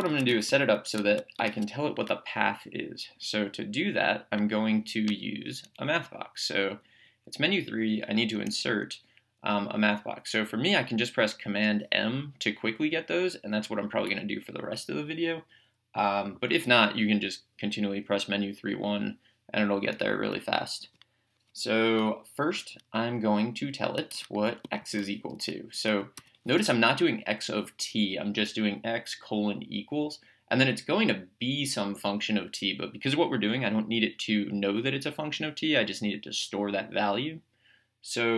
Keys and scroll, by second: 0.3-1.2 typing, 1.4 Return, 5.1 Menu, 6.7 Down, 8.5 Right, 20.8 Return, 24.1 x, 26.2 =.